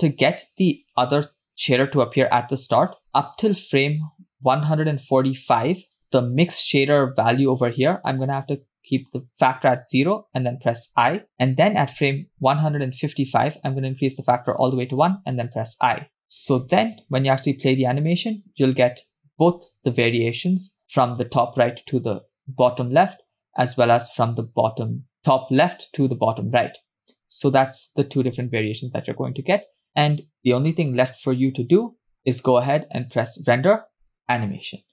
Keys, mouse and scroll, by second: 1.2 space, 3.1-6.0 drag, 6.0-7.5 middle drag, 8.2-9.0 scroll up 1, 9.0 scroll up 1, 9.2 click, 10.9 i, 12.1 click, 13.6-14.7 drag, 15.6 i, 16.2 scroll down 3, 16.5 click, 17.2 space, 30.4 space, 30.8 space, 31.3 space, 33.3-34.9 drag.